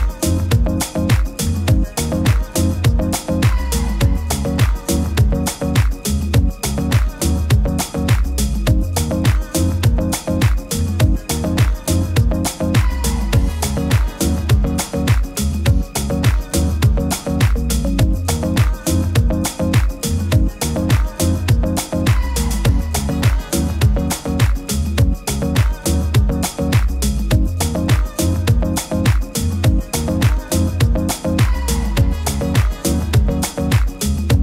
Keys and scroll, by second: 3.5 super+-, 3.7 super+-, 3.9 super+-, 10.9 super++, 11.0 super++, 20.4 super++, 20.7 super++, 20.7 super++.